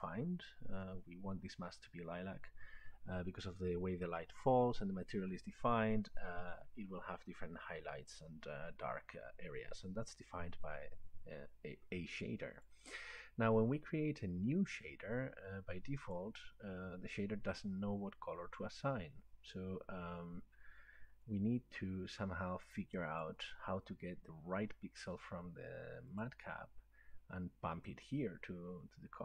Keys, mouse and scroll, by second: 12.6-16.2 drag, 23.2 click, 26.2 click.